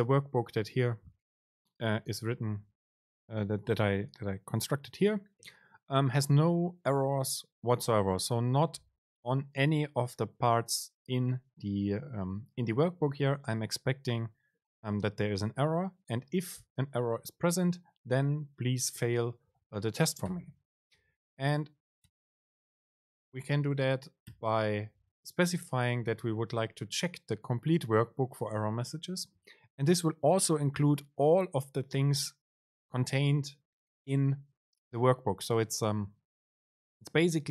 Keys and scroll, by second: 23.4 super+space.